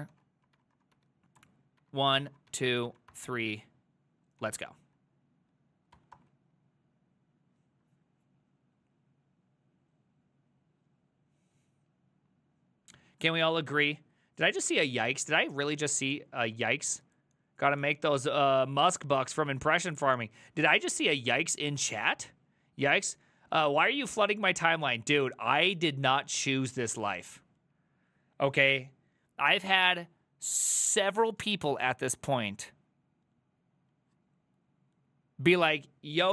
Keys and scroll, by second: 0.0-4.4 typing, 5.9-6.7 typing.